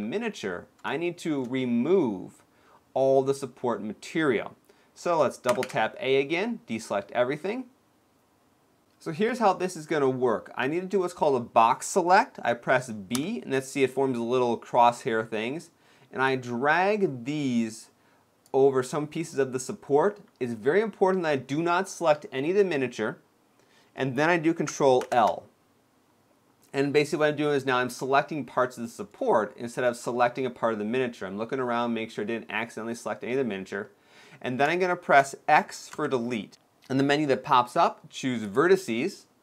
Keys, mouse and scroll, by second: 0.9 shift+middle click, 4.7 scroll down 1, 5.3 a, 5.4 a, 6.6 scroll up 1, 8.9 scroll up 1, 12.8 b, 24.8 ctrl+l, 27.2 middle click, 28.5 shift+middle click, 28.9 middle click, 29.8 middle click, 31.2 middle click, 31.4 shift+middle click, 33.7 middle click, 34.2 scroll down 2, 34.5 shift+middle click, 35.6 x.